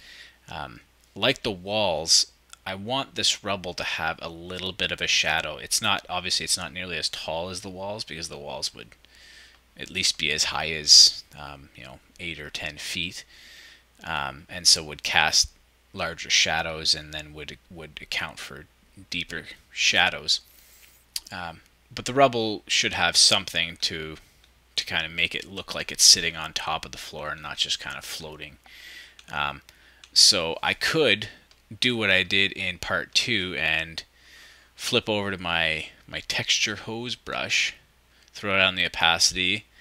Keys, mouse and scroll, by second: 23.8-25.2 scroll down 1, 25.3 shift+=, 26.9 -, 29.1 shift+=, 30.3-32.2 ctrl+drag.